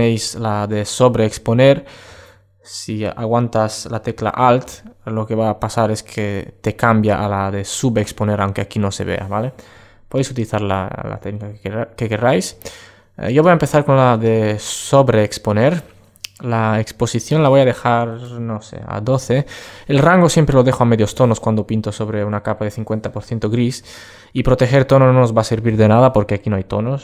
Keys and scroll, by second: 12.0 super+space.